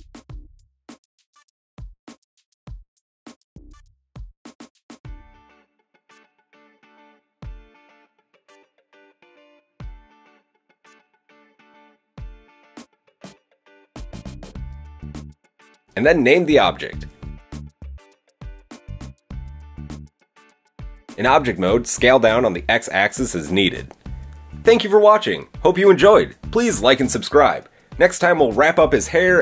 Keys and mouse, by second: 1.0 alt+s, 2.4-3.8 drag, 3.9-7.3 drag, 4.8 alt+s, 7.3-8.9 middle drag, 8.9-10.8 alt+drag, 9.3 alt+s, 10.8-12.8 middle drag, 13.4 shift+click, 13.7 shift+middle click, 14.1-16.9 drag, 15.2 Tab, 17.0 click, 19.2-20.0 drag, 20.3-21.0 drag, 20.3 KP_7, 22.0-22.6 drag, 22.6 s, 26.0-28.0 middle drag, 28.0 click, 28.1-29.4 middle drag.